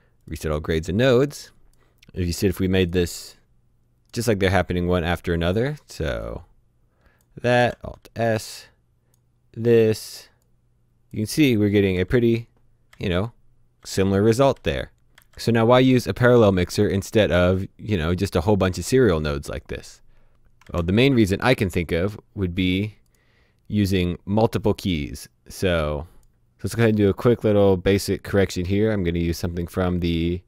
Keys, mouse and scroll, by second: 0.2 click, 3.3 click, 6.2 click, 7.5 alt+s, 8.1 click, 11.9 ctrl+b, 12.9-15.1 typing, 17.2 ctrl+Num_Lock, 17.2 typing, 20.5 ctrl+Num_Lock, 20.5 typing, 22.6 click, 25.2 click, 27.5 right click.